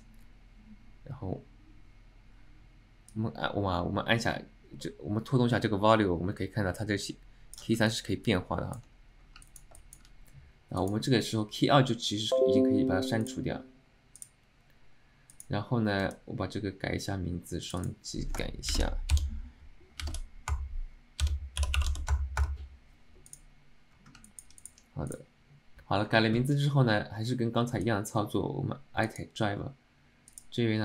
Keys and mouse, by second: 3.2-7.7 drag, 8.0 alt+middle click, 9.6 alt+middle click, 9.9 shift+middle click, 10.9 click, 13.3 click, 15.4 click, 17.8 click, 17.9-23.2 drag, 23.4 click, 24.4 alt+middle click, 24.7 click, 25.2 click.